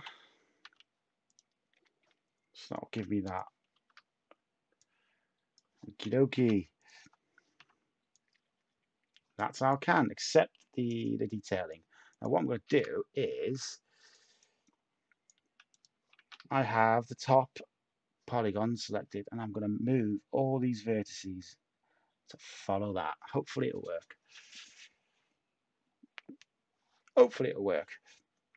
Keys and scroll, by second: 0.0-0.6 typing, 3.7 a, 6.3 a, 7.5 /, 12.6 a, 16.1 a.